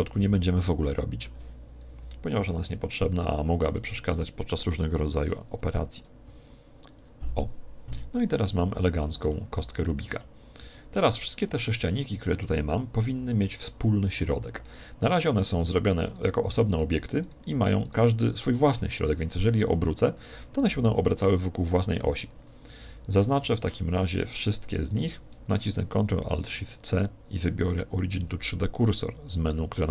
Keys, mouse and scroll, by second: 1.9 KP_1, 4.0 shift+d, 7.0 click, 7.4-13.6 middle drag, 10.0 a, 10.6 z, 13.1 KP_1, 14.7-19.4 right drag, 23.2 a, 23.6 b, 26.5 ctrl+alt+shift+c.